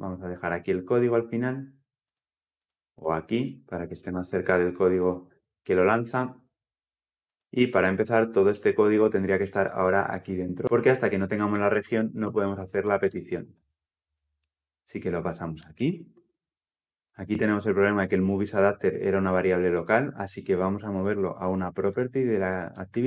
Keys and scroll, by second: 4.0 ctrl+v, 12.1 ctrl+x, 15.5 ctrl+x, 16.0 ctrl+v.